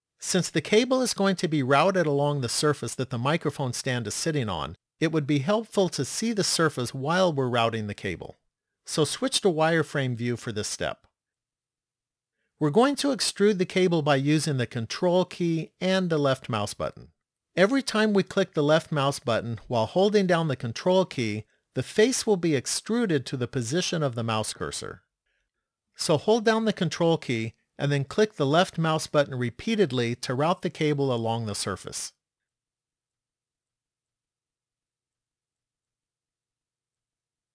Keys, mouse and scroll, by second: 9.0 click, 28.2 ctrl+click, 29.2 ctrl+click, 30.0 ctrl+click, 31.4 ctrl+click, 34.5 ctrl+click, 35.5 ctrl+click, 36.7 ctrl+click.